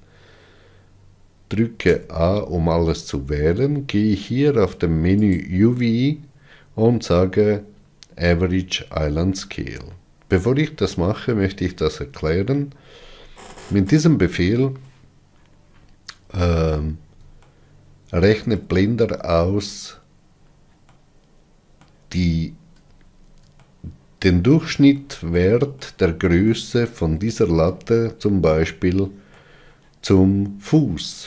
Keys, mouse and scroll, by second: 6.0-21.6 drag, 21.6-31.2 middle drag.